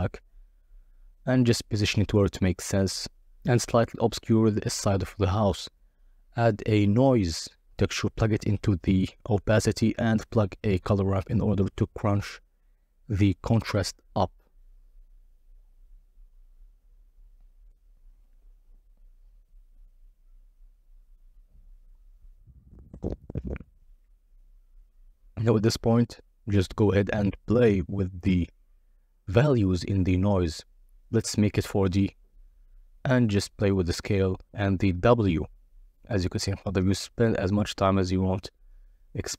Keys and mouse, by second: 0.9 shift+a, 2.8 click, 3.6-5.2 drag, 5.4 shift+a, 8.7-9.4 drag, 9.9-13.1 drag, 13.7-14.9 drag, 15.6-16.3 drag, 16.6 click, 18.2 KP_0, 20.1 g, 22.5 click, 25.8 n, 26.9 click, 27.5-28.3 drag, 30.0 click, 30.4-31.9 drag, 32.5-35.0 shift+drag, 35.5-39.3 shift+drag.